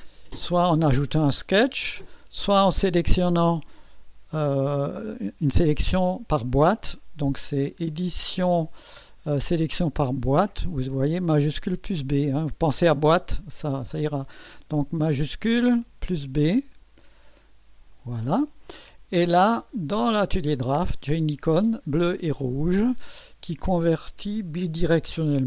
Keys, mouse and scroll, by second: 8.1 click, 15.1 click, 15.8 shift+b, 16.5-18.1 shift+drag.